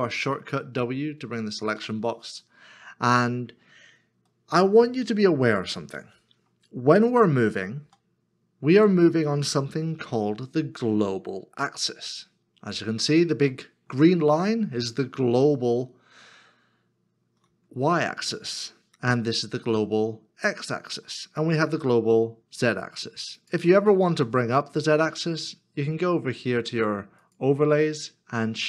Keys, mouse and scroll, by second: 2.0 w, 3.4-3.7 scroll down 1, 6.1 middle click, 7.8 g, 17.5 u, 19.2 x, 21.8 z, 24.0 z.